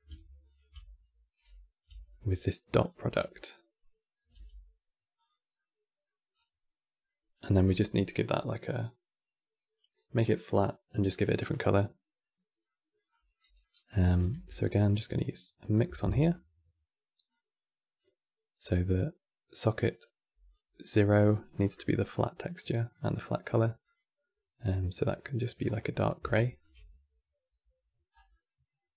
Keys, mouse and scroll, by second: 0.2 ctrl+shift+click, 2.8 scroll down 9, 3.1 middle click, 5.3 middle click, 6.0-6.7 scroll down 4, 6.7-9.9 middle drag, 12.3 middle click, 12.8 scroll up 7, 13.1 middle click, 13.8 click, 14.0 shift+d, 14.5 middle click, 15.4 scroll up 2, 17.0 drag, 18.6 click, 20.8-22.3 scroll up 10, 21.0 middle click, 22.3 click, 23.5 click, 26.3 ctrl+shift+click, 27.8-28.1 scroll down 5, 28.1-28.9 middle drag.